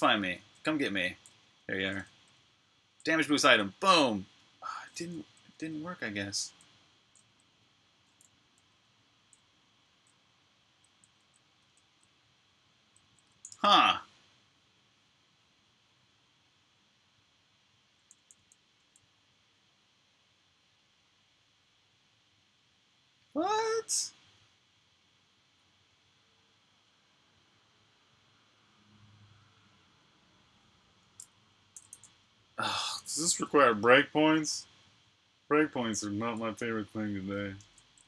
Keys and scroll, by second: 0.0-7.8 typing, 12.2-13.0 typing, 13.4 super+q, 17.8-18.6 typing, 31.5-32.7 typing, 33.4 super+Tab, 37.4 super+Tab.